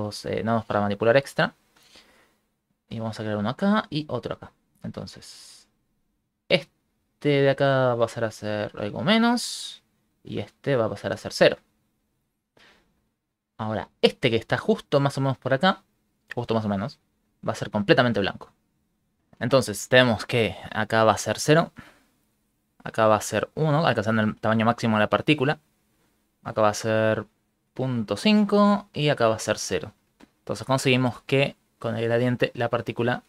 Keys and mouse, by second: 0.1 click, 0.7 click, 3.0 click, 3.8 click, 5.0 click, 6.2 click, 7.2 click, 7.6 click, 9.6 click, 10.2 click, 10.6 click, 13.6 click, 16.4 click, 19.2 click, 20.6 click, 21.4 click, 22.5 click, 23.5 click, 26.0 click, 27.0 click, 27.4 click, 27.8 click, 29.1 click, 29.9 click, 31.3 click.